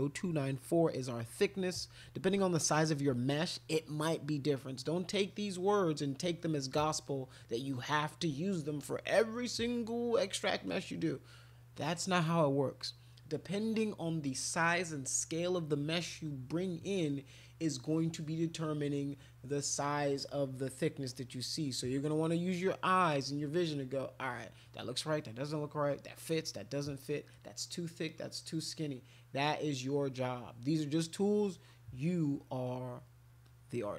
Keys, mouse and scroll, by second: 33.4 click.